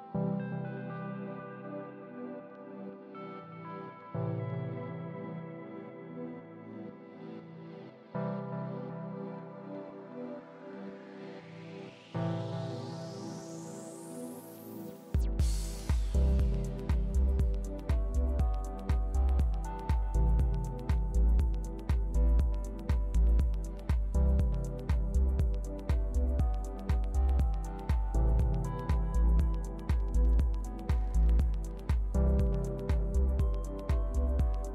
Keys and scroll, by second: 0.5 super+c, 3.5 super+v, 6.5 super+c, 8.5 super+v, 11.9 super+c, 13.8 super+v, 16.7 super+c, 18.6 super+v, 29.1 shift+Left, 30.4 shift+Right, 32.1 shift+space.